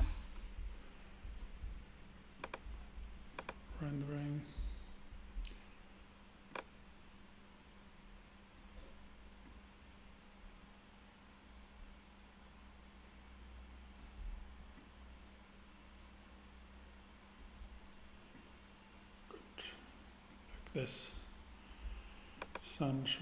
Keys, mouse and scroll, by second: 2.4-3.3 drag, 4.2-5.2 middle drag, 6.5 click, 8.4-9.4 middle drag, 10.4 middle click, 14.8 click, 16.7 middle click, 18.3-19.7 drag, 20.2-22.4 middle drag.